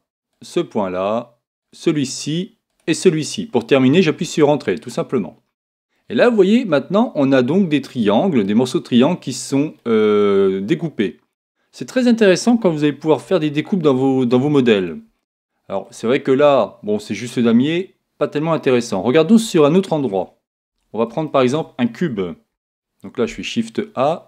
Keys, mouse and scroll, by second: 5.9-7.7 middle drag, 9.8-11.5 middle drag, 11.6 middle click, 13.4-18.1 middle drag, 18.4-20.7 middle drag, 20.7 Tab, 21.8-23.3 middle drag, 22.5 shift+a.